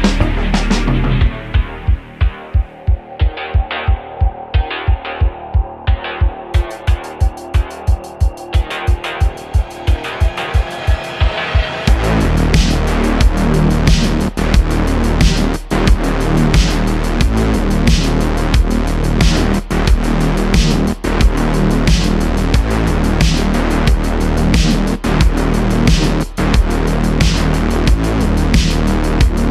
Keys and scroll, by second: 0.5 Tab, 4.8 3, 5.2 Tab, 5.8 3, 10.6 Tab, 11.9 Tab, 18.1 Tab, 21.9 Tab, 22.3 a, 22.9 e, 24.2 Tab, 25.4 q.